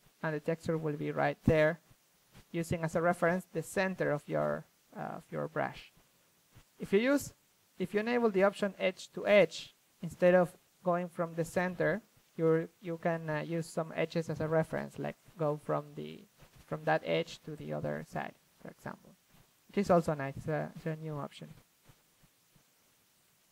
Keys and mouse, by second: 0.0-1.5 drag, 1.2 ctrl+z, 1.5 shift+f, 1.6 click, 1.9-6.7 drag, 4.3 ctrl+z, 9.2 ctrl+z, 10.1-11.6 drag, 11.6-13.2 middle drag, 13.2 click, 13.5-14.3 middle drag, 14.3-15.4 drag, 15.4 middle click, 21.6-22.1 middle drag, 22.1-23.4 drag.